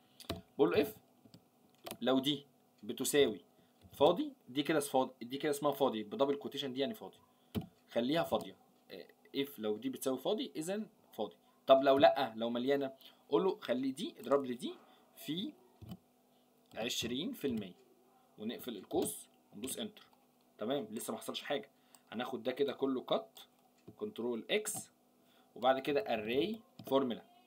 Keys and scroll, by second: 24.7 ctrl+x.